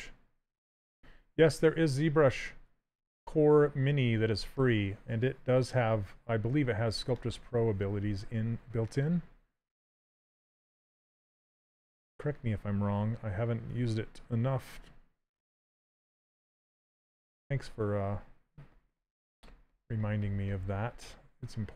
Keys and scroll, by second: 10.2 s.